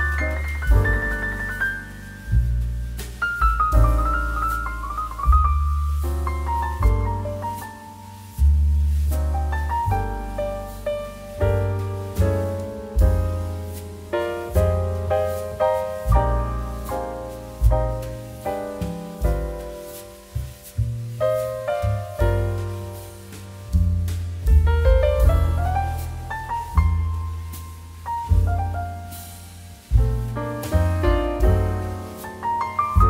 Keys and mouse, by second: 0.2 middle click, 0.4 shift+middle click, 0.7 shift+d, 1.0 z, 1.7 click, 3.0 1, 3.6 BackSpace, 3.9 0, 4.0 Return, 4.7 middle click, 5.4 shift+middle click, 5.8 middle click, 6.3 shift+middle click, 6.5 middle click, 6.7 shift+middle click, 6.9 middle click, 8.5 middle click, 8.7 shift+middle click, 10.8 click, 14.5 click, 15.0 middle click, 16.1 click, 16.2 middle click, 16.5 shift+a, 18.0 shift+a, 18.7 middle click, 19.7 click, 20.1 g, 21.6 click, 21.7 g, 22.1 shift+z, 24.7 r, 27.1 click, 27.6 r, 27.8 z, 28.5 click, 30.7 g, 30.9 shift+z, 32.9 click.